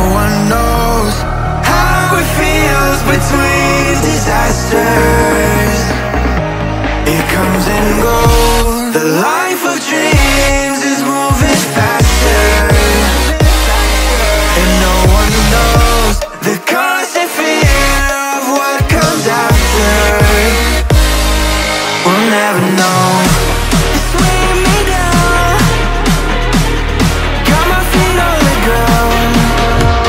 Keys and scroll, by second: 2.2 ctrl+z, 10.6 Return, 19.0 Return.